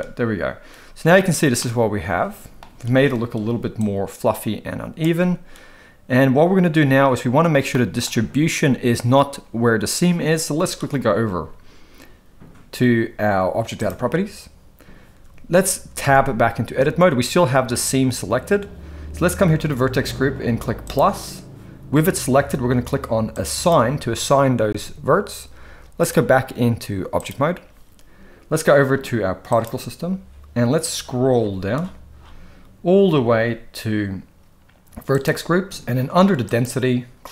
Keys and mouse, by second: 1.6-2.6 middle drag, 3.9-5.0 shift+drag, 7.8 middle drag, 16.0 Tab, 20.8 click, 23.4 click, 23.6 click, 26.0-27.3 drag, 35.1 click, 36.5-37.3 drag.